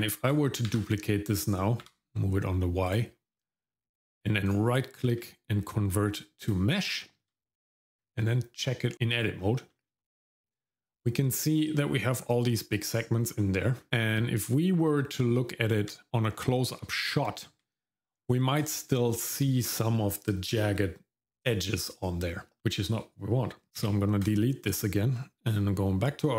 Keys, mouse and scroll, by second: 0.7 shift+d, 4.5-6.9 right drag, 6.9 shift+middle click, 7.3 middle click, 8.0 Tab, 8.9 shift+middle click, 8.9-9.4 scroll up 1, 9.4-9.7 scroll down 1, 9.7 middle click, 13.4 middle click, 13.7 scroll up 2, 13.9-14.3 scroll down 2, 15.2 Tab, 16.1 middle click, 16.1 scroll up 2, 16.3-16.7 scroll down 1, 16.8 ctrl+middle click, 18.0-18.4 scroll down 2, 18.5 middle click, 19.0 shift+middle click, 21.4 right click, 22.6 shift+middle click, 22.6-23.2 scroll up 1, 23.8 x, 25.5 click.